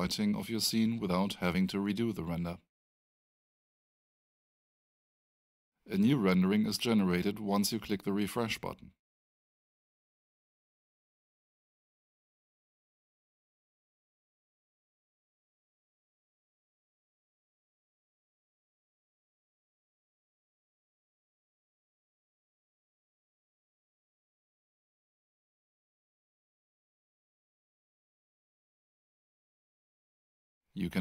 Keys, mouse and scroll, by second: 1.7 click, 3.9 5, 4.9 Tab, 6.1 click, 9.2-10.4 scroll down 1, 12.0 click, 17.4 click, 21.8 click, 27.3 click.